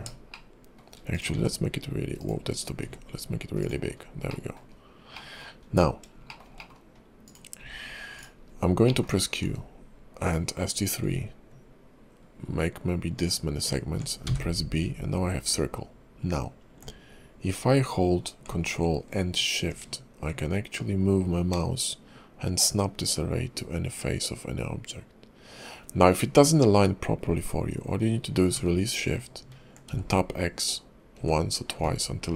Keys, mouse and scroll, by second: 0.3 shift+middle click, 1.1 click, 1.3 s, 2.5-3.0 scroll down 2, 2.8 s, 3.8-4.3 scroll up 3, 4.3 middle click, 4.6-5.3 scroll down 3, 5.1 middle click, 5.5-6.1 scroll up 3, 6.3 shift+middle click, 6.5 middle click, 7.2 click, 7.6 s, 8.4 scroll up 2, 8.8 middle click, 9.1-10.3 scroll down 2, 9.4 q.